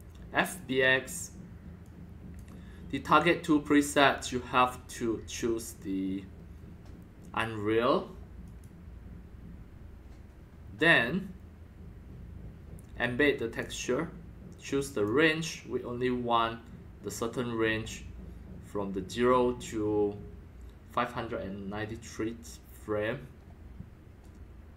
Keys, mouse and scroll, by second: 0.4 click, 1.8 click, 3.6 click, 8.4 click, 13.5 click, 14.9 click.